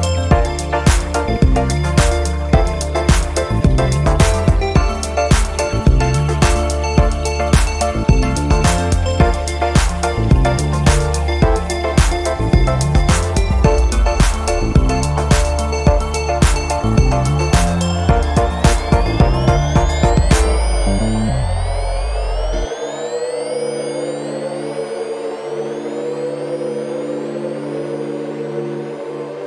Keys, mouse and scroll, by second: 4.9 1, 6.6 2, 8.3 3, 10.1 4, 11.2 5, 13.2 0, 14.7 scroll down 2, 15.2-17.4 drag, 17.7 -, 18.7 click, 19.7 0, 20.4 scroll down 1, 21.2 scroll up 1, 21.7-22.9 scroll down 2, 22.9 click, 24.8-26.8 drag, 28.0 click.